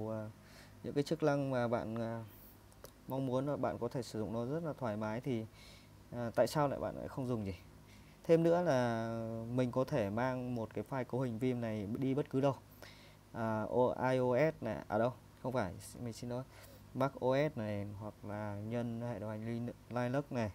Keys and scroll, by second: 8.0 Down, 9.5 Right, 9.8 Right, 10.2 Right, 10.4 Right, 10.6 Right, 10.8 Right.